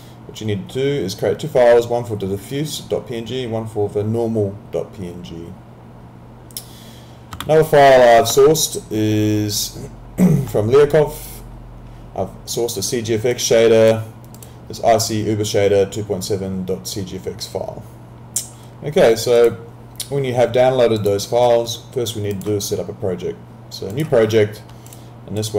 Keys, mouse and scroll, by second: 7.5 alt+Tab, 9.5 click, 13.3 click, 19.4 click.